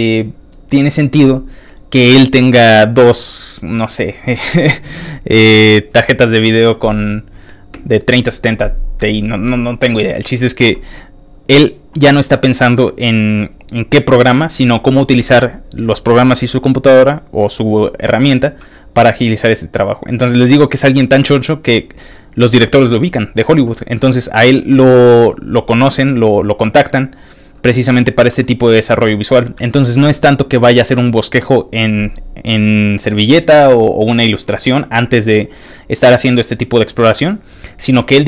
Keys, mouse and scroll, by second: 13.0 middle click, 13.0 scroll up 1, 16.6 middle click, 17.4 middle click, 18.3-19.6 scroll down 4, 19.9 middle click, 20.3 middle click, 20.6 middle click, 20.9 middle click, 21.4 middle click, 21.9-23.2 middle drag, 24.1 middle click, 24.9-26.8 middle drag, 26.9 middle click, 27.0 middle click, 27.1 middle click, 27.5 middle click, 27.8 middle click, 28.4 middle click, 28.5 middle click, 28.9 middle click, 29.5 middle click, 30.2 middle click, 30.8 middle click, 30.8-31.4 scroll up 2, 36.8 scroll down 3.